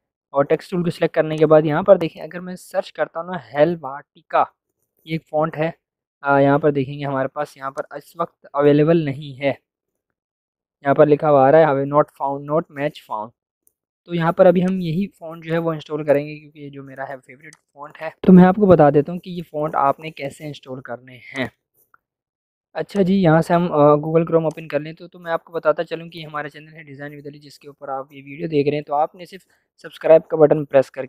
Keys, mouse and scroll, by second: 1.3 click, 2.7-4.5 typing, 7.7 click, 14.6 click, 17.4 click, 17.6 click, 21.3 click, 23.0-31.0 drag.